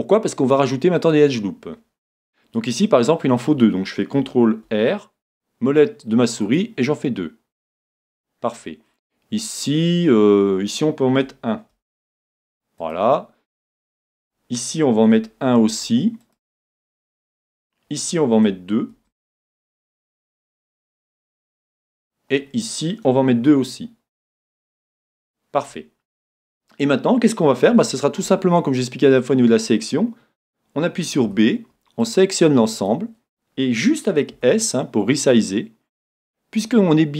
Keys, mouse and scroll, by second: 1.1-3.0 drag, 4.6 ctrl+r, 7.9-9.6 drag, 9.7 click, 11.7 ctrl+r, 12.9-14.7 drag, 15.7 ctrl+r, 16.7-18.6 drag, 18.9 ctrl+r, 21.7-23.5 drag, 23.5 ctrl+r, 25.3-27.1 drag, 27.7 a, 31.2 b, 34.4 s.